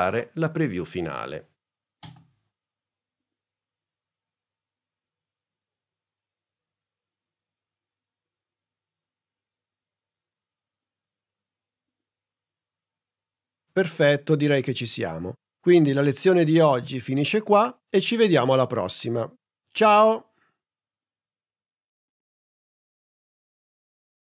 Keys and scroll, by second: 2.0 space.